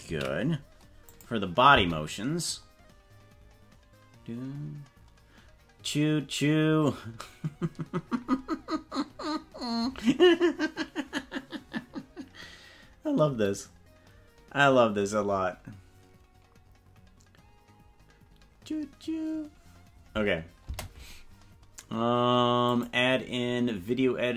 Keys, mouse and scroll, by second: 0.5 ctrl+s, 1.0 click, 1.7 space, 20.6 space, 22.6 click.